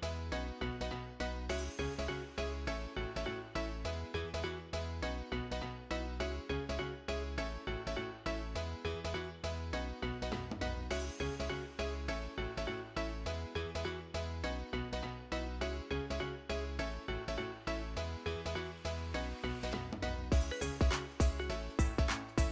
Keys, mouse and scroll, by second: 0.0-0.8 typing, 5.4 double click, 6.0-6.8 typing, 11.8 double click, 12.3-13.5 typing, 18.0 double click, 18.4-19.3 typing, 21.1 middle click, 21.2 alt+scroll down 1, 21.3 alt+middle click, 22.0 alt+middle click.